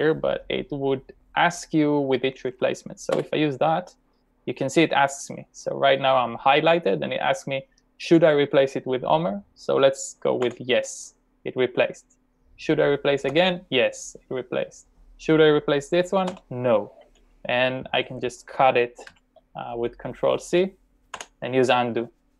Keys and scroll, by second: 3.1 Return, 10.5 y, 13.3 y, 16.5 n, 19.1 ctrl+c, 21.1 u.